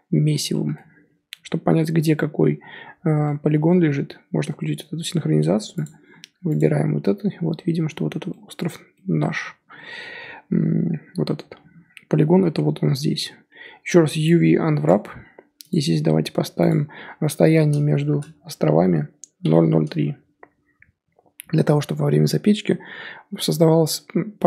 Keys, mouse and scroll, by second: 0.5-1.1 middle drag, 1.1 3, 3.3-6.6 middle drag, 6.6 click, 9.7 a, 14.8 u.